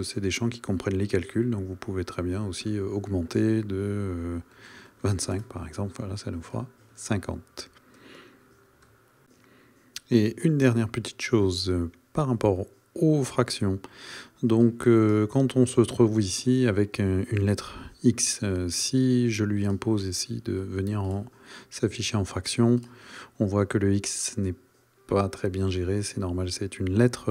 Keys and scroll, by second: 2.6 shift+=, 5.3 Return.